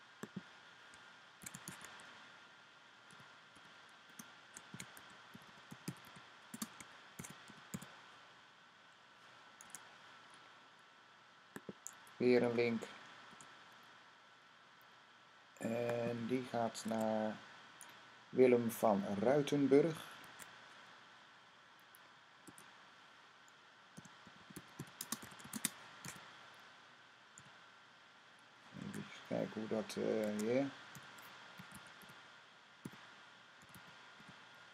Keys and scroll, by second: 1.0-8.1 typing, 9.5 typing, 13.1 v, 16.7 Tab, 19.5 Tab, 20.1 Tab, 22.3 typing, 23.5-25.9 typing, 27.2 typing, 28.6 Tab, 30.1 Tab, 30.5-34.7 typing.